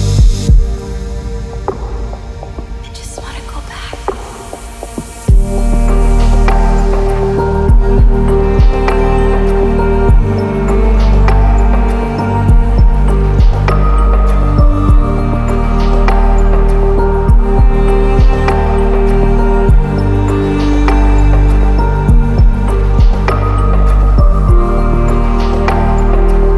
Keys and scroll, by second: 22.9 ctrl++, 23.0 ctrl++, 23.1 ctrl++.